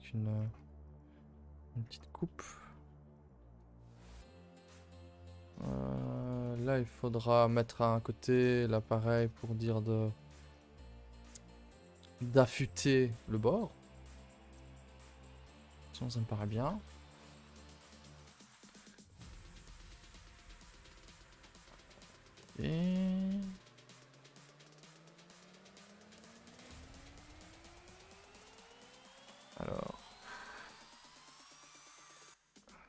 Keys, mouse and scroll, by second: 0.4 click, 2.4 click, 6.1 click, 8.3 click, 9.4 click, 14.7-20.3 middle drag, 20.3 click, 23.7 click, 25.4-28.4 drag, 28.7 middle click, 29.2-29.7 scroll up 4, 29.6 shift+middle click, 30.5 scroll up 2, 30.8 shift+middle click, 31.2 click, 31.6 scroll down 1.